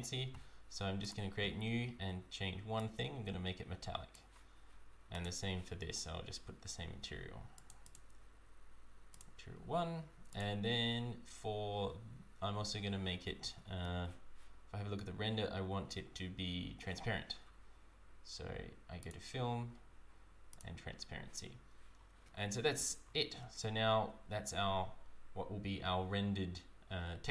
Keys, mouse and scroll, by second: 19.1 click, 22.6-23.1 scroll up 4, 23.7 scroll up 5.